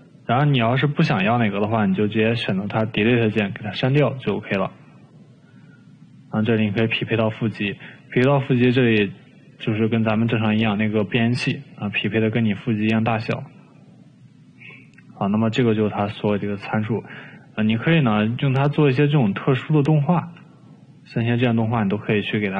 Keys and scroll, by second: 2.4 Delete, 3.9 ctrl+z, 20.5 ctrl+z, 21.9 ctrl+z.